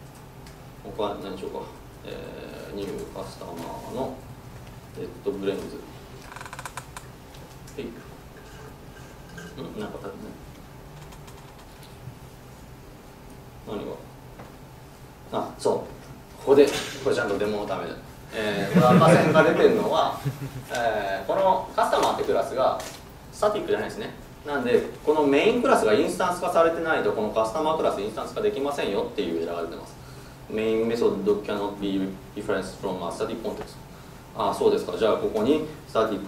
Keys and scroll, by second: 3.7 Tab, 7.7 ctrl+shift+super+Return, 12.5 ctrl+shift+super+Return.